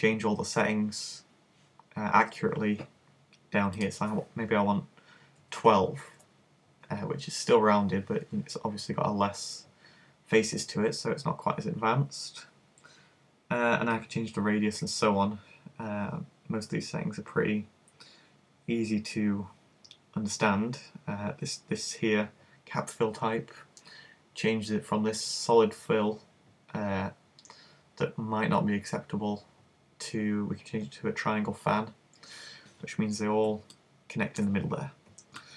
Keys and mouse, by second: 11.6-14.0 middle drag, 14.0 click, 15.7 middle click, 22.5 click, 24.4-26.6 middle drag, 26.6 click, 29.8 click, 33.4 middle click, 34.1 middle click, 35.1 middle click.